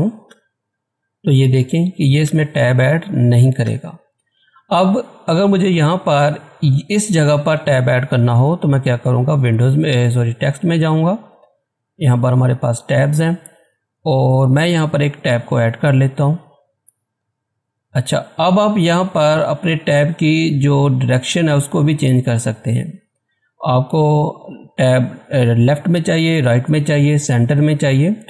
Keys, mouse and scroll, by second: 0.2 Tab, 2.2 Tab, 6.9 click, 10.7 click, 15.4 click, 19.8 click, 19.8 typing, 22.4 typing, 27.6 click, 27.6 typing.